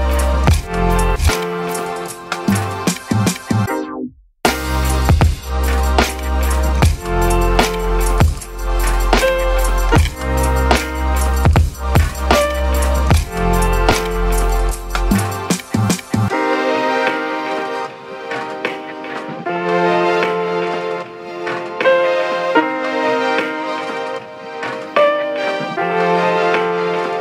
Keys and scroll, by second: 1.1-2.0 typing, 5.2 ctrl+d, 7.4 Delete, 8.1-8.9 typing, 10.7-11.2 typing, 11.7 ctrl+z, 26.7 ctrl+z.